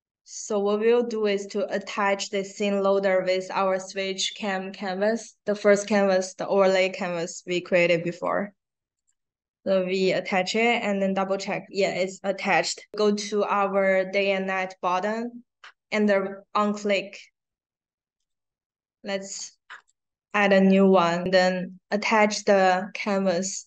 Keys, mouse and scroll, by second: 1.4-8.2 drag, 8.8 click, 9.6-10.0 scroll down 1, 15.1 scroll down 1, 18.1 click, 19.7 click, 20.2 click, 20.6 scroll down 2, 21.8-23.6 drag.